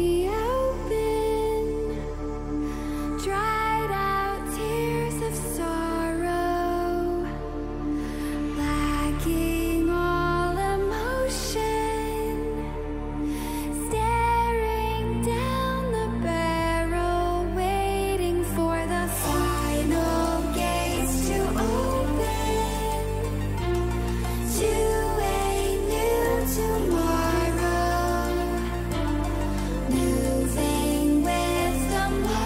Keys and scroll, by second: 0.6 Delete, 1.1 BackSpace, 2.1 r, 3.8 BackSpace, 4.0 r, 5.1-6.7 typing, 8.4 s, 9.2 c, 16.3 v, 19.5 ctrl+=, 23.7 t.